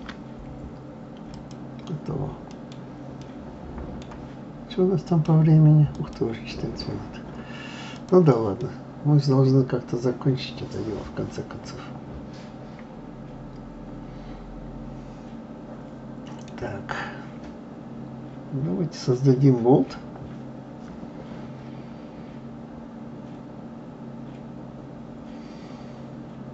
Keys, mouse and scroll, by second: 2.5-6.2 middle drag, 7.2-7.6 scroll down 2, 7.9 click, 8.6-11.6 middle drag, 16.5-16.9 scroll down 2, 18.0-18.4 scroll down 2.